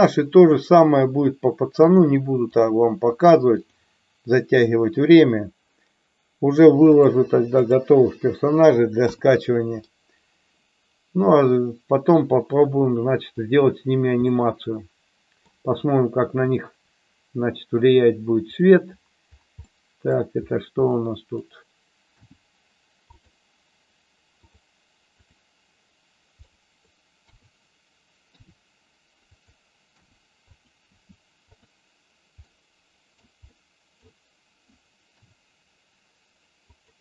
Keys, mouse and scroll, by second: 3.7 click, 6.8 click, 9.1 KP_1, 9.8-13.3 middle drag, 14.3-15.5 middle drag, 16.3 click, 18.5 click, 19.7-20.2 middle drag, 20.8-21.5 middle drag, 22.1 g, 23.1 click, 25.2 click, 26.5-26.8 middle drag, 27.3 KP_3, 28.5 r, 29.3 click, 30.0 g, 31.6 click, 32.4-33.2 middle drag, 33.4 middle click, 35.2 r, 36.7 click.